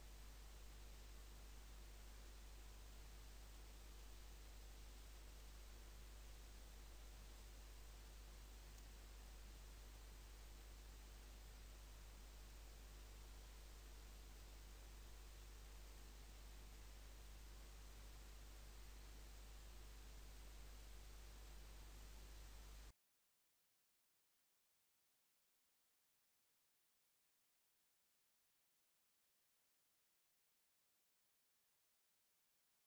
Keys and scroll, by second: 4.4 Insert, 7.4 Insert, 11.0 e.